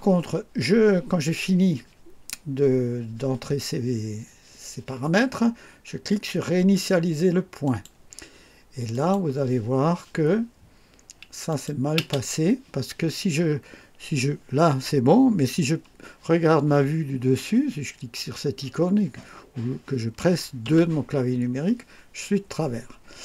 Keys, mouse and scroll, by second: 7.6 click, 8.9 click, 11.5 click, 12.0 space, 20.6 2.